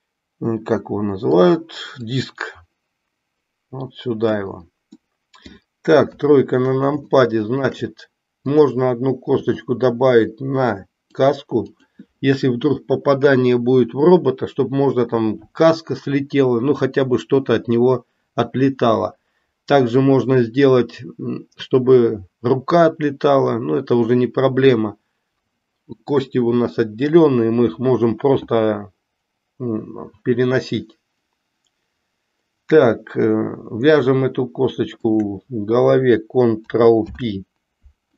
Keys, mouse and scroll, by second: 2.0-4.3 drag, 4.9 middle click, 4.9 scroll up 1, 5.6 scroll down 1, 7.2 shift+middle click, 9.4 e, 36.9 ctrl+p.